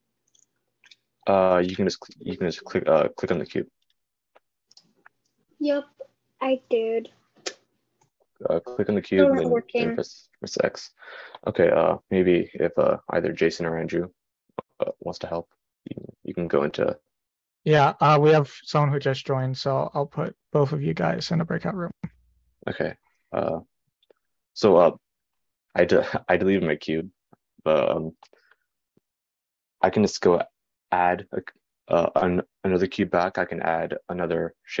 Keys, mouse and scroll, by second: 20.0-34.8 middle drag, 20.0-34.8 right drag.